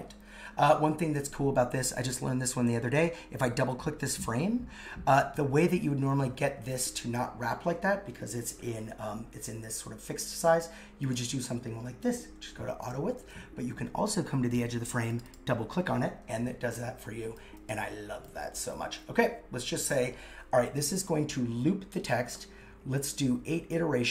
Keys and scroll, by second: 13.2 super+z.